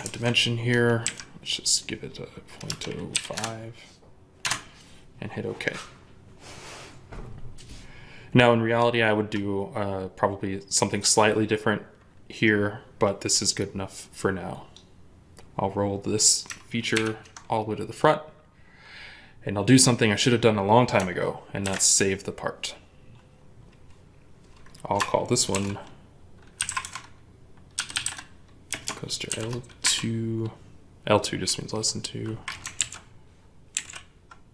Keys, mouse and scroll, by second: 0.9 typing, 2.5-3.0 typing, 3.2 Return, 4.3 Return, 13.1 right click, 16.8 ctrl+7, 25.3 typing, 26.4-27.9 typing, 29.7 typing.